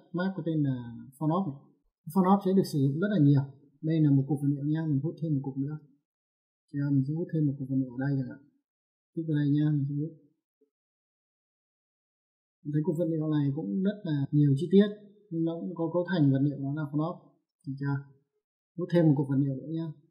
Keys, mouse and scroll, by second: 0.6 click, 2.1 middle click, 3.5 middle click, 5.2 middle click, 11.4 click, 14.1 click, 14.3 middle click, 15.6 middle click, 16.5 click.